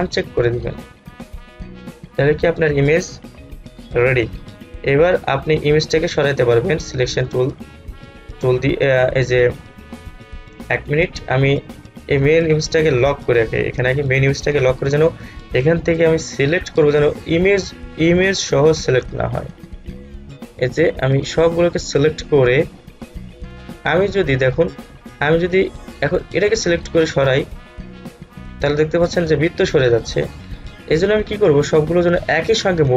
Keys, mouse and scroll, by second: 0.0 click, 2.3-2.7 scroll down 1, 5.7-12.1 drag, 12.1-13.1 scroll down 1, 13.1 click, 16.7-30.6 drag, 30.6 ctrl+z.